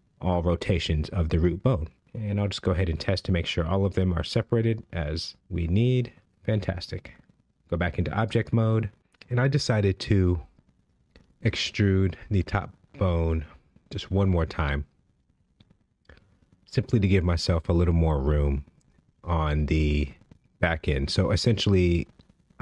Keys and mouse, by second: 0.0 g, 0.3-0.9 right drag, 0.9 click, 1.1 g, 1.4-1.7 right drag, 2.3 g, 2.6-3.2 right drag, 3.2 click, 3.4 g, 3.7-4.4 right drag, 4.4 g, 4.8-5.9 right drag, 6.0 ctrl+Tab, 13.4 shift+middle drag, 15.1 Tab, 15.9 click, 20.4 e, 20.9 z.